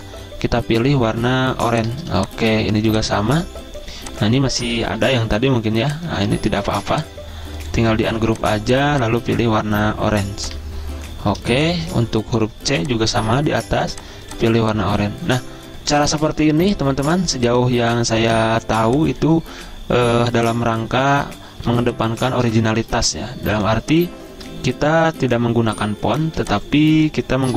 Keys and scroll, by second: 5.3 Delete, 5.8 Delete, 6.6 Delete, 22.0-23.8 typing, 26.6 z.